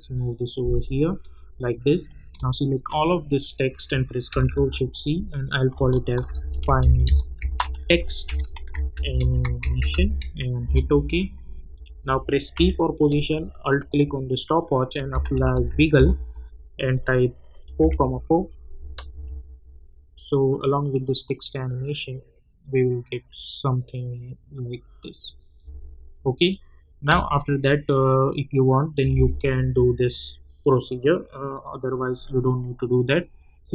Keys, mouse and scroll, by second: 2.6 shift+click, 4.4 ctrl+shift+c, 5.8-10.4 typing, 10.6 Return, 12.5 p, 13.9 alt+click, 14.7-16.1 typing, 17.4-19.1 typing, 18.9 click, 25.6 space, 26.5 click.